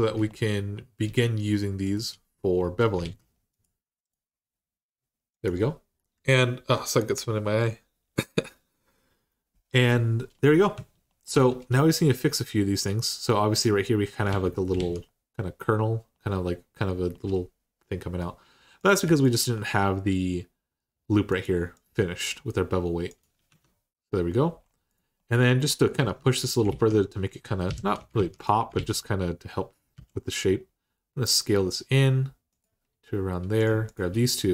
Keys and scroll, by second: 2.8 alt+z, 10.5 Tab, 11.1 Tab, 14.1 alt+z, 14.5 alt+z, 23.3 Tab, 25.8 Tab, 26.5 alt+z, 27.5 3, 27.9 alt+z, 28.5 alt+z, 29.7 s, 34.3 s.